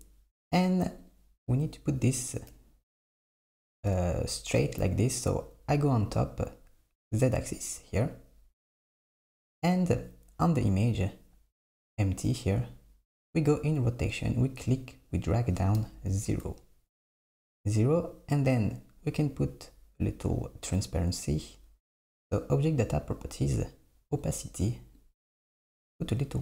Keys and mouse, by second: 1.1 click, 2.5 KP_7, 9.0 click, 10.5 click, 14.4-17.1 drag, 22.4 click, 24.1 click, 25.0-26.4 drag.